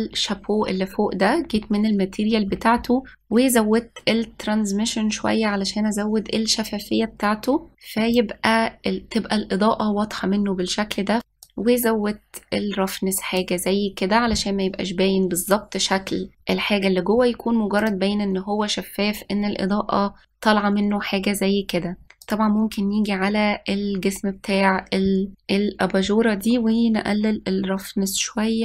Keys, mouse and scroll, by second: 0.1 click, 3.0-4.3 scroll down 12, 4.3-7.5 drag, 12.2-15.4 drag, 18.6 click, 23.0 click, 25.4 middle click.